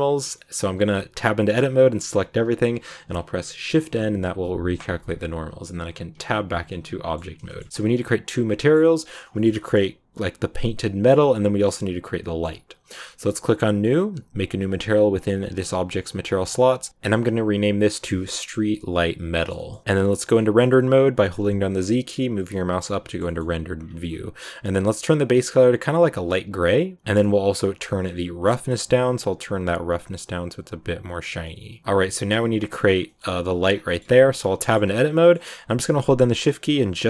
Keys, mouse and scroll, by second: 0.2-1.5 scroll up 1, 1.5 a, 2.7 shift+n, 3.3 scroll down 2, 3.5-6.1 middle drag, 6.1 Tab, 6.6-7.7 middle drag, 7.7 scroll up 1, 7.8-13.1 middle drag, 13.1-16.3 drag, 16.5 click, 16.7 click, 19.3 shift+middle click, 19.6 scroll down 1, 19.8 middle click, 20.3-21.3 scroll down 1, 21.3 z, 23.0 shift+middle click, 23.7-24.0 scroll down 8, 24.0-24.9 scroll up 1, 24.9 click, 27.9-29.1 scroll down 6, 29.1 click, 29.8-31.4 drag, 31.4-32.8 middle drag, 32.8 scroll up 2, 33.0 middle click, 33.6 scroll down 3, 33.8 middle click, 34.0 Tab, 34.2-34.9 scroll up 3, 34.5 shift+middle click, 35.1 middle click, 35.7 right click, 36.6 shift+right click.